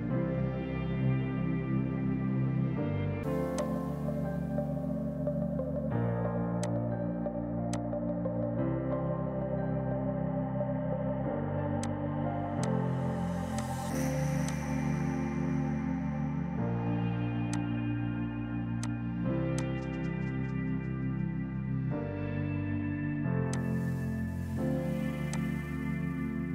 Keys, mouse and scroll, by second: 0.0 click, 1.7 space, 3.6 click, 6.7 click, 11.9 click, 17.6 alt+click, 18.9 shift+click, 19.1 Delete, 19.6 click, 23.4 F2, 23.6 click.